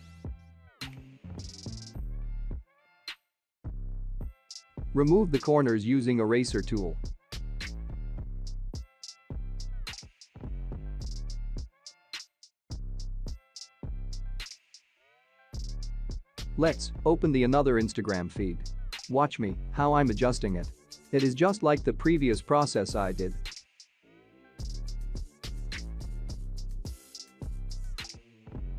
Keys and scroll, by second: 12.1 ctrl+0, 26.6 ctrl+j.